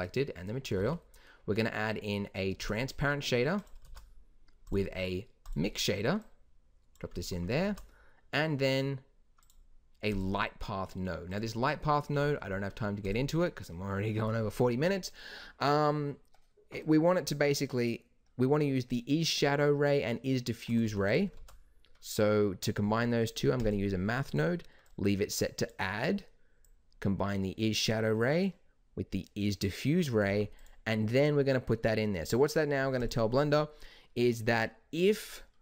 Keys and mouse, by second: 0.8 shift+a, 3.8 shift+a, 6.9 click, 7.6 shift+a, 12.1 g, 18.9-20.7 drag, 20.8 g, 21.3 shift+a.